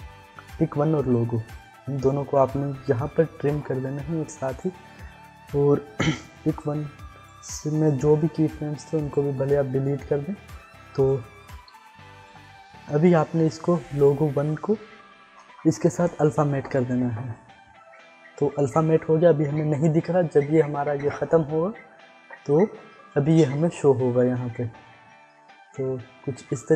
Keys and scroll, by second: 3.0 alt+[, 8.0 u.